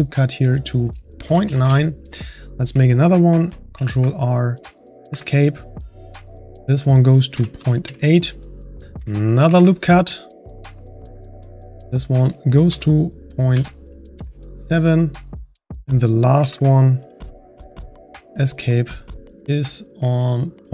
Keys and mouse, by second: 3.7 ctrl+r, 6.6-9.5 drag, 9.5 ctrl+r, 11.8-16.4 drag, 16.4 ctrl+r.